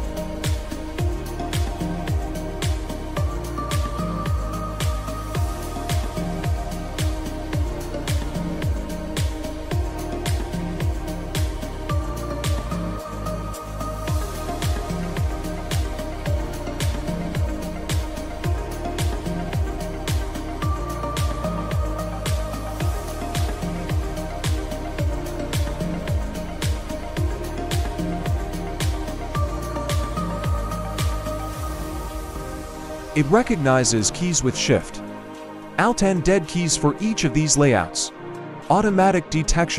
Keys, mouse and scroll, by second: 7.0 click, 14.0 click, 19.1 Caps_Lock, 25.4 Page_Down, 25.9 Page_Up, 27.6 Page_Down, 29.8 Down, 31.4 Right, 32.4 Up, 33.9 Left, 35.9 scroll down 5, 36.6 scroll down 2, 37.4 scroll up 2, 38.9 scroll down 1.